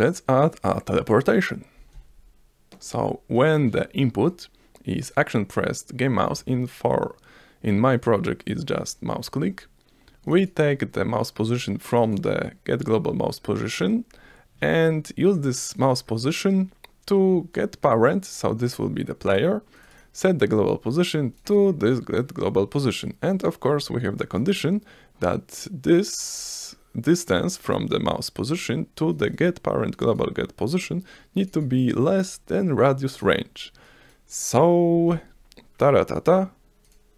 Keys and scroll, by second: 35.1 F5.